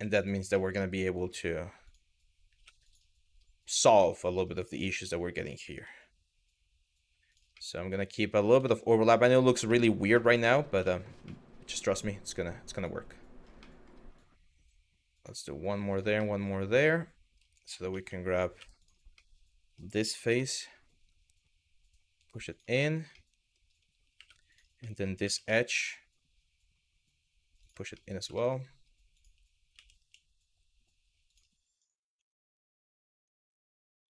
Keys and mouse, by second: 0.3 middle click, 1.5 click, 2.2 2, 3.3 click, 3.7 middle click, 5.1 g, 5.4 y, 7.3 middle click, 8.4 shift+middle click, 8.8 middle click, 9.4 shift+middle click, 9.9 middle click, 10.6 shift+middle click, 11.0 middle click, 13.3 middle click, 13.8 click, 15.5 click, 15.8-17.0 middle drag, 17.6 3, 18.2 w, 18.4 click, 18.9 middle click, 19.6 g, 22.1 click, 22.5 shift+middle click, 22.9 middle click, 23.8 2, 24.1 click, 24.5 middle click, 24.8 g, 27.2 click, 27.6 middle click, 28.0 middle click, 28.7 click, 29.4 g, 29.6 y, 30.9 click, 31.8 g, 32.8 click, 33.2 shift+middle click.